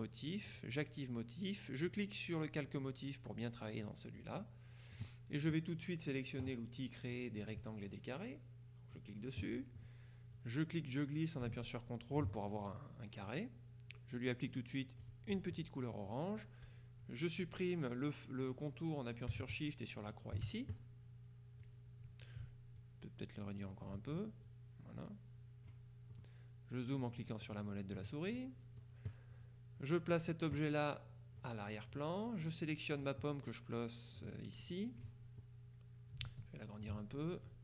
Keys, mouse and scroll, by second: 0.0 click, 1.9 click, 4.4-9.0 middle drag, 9.0 click, 10.4-12.7 drag, 15.1 click, 20.2 shift+click, 21.7 click, 22.8-24.4 ctrl+drag, 24.5-26.2 drag, 27.1-28.1 drag, 28.4 click, 31.5-32.5 drag, 33.1-34.9 drag, 36.3 ctrl+click.